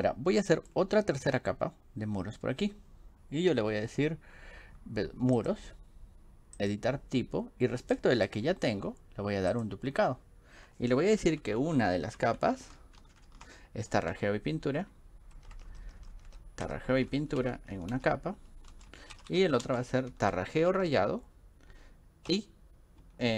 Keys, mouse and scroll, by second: 0.0 scroll down 1, 0.4 scroll up 1, 5.4 click, 6.6 click, 11.4 Right, 12.2 ctrl+shift+Left, 12.4 ctrl+shift+Left, 12.6 ctrl+shift+Left, 13.0 ctrl+shift+Left, 13.2 ctrl+shift+Left, 14.1 click, 15.4 click, 15.6 click, 15.7 click, 17.4-20.7 typing, 22.3 -.